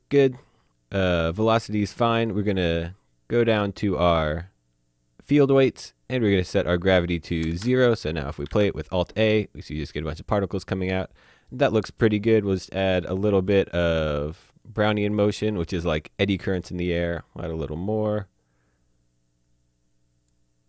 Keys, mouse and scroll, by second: 0.0-0.5 scroll down 1, 1.5-3.7 scroll down 1, 5.5 click, 6.1-6.9 scroll down 1, 6.9 click, 7.5 KP_0, 7.6 KP_Enter, 8.4 click, 8.5 alt+a, 9.7 middle click, 14.7 click, 17.7 click.